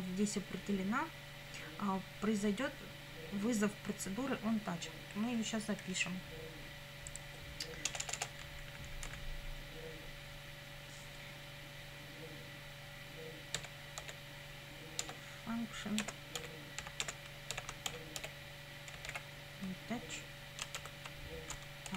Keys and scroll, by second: 7.9 Return, 8.7 Up, 13.6 f, 14.0 u, 15.0 Tab, 16.0-19.6 typing, 20.8 shift+9.